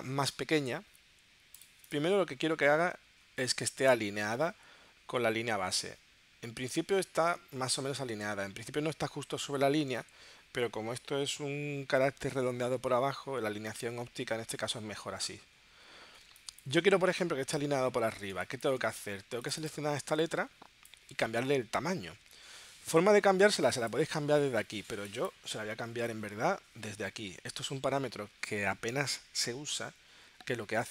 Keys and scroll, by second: 16.2 space, 16.8 space.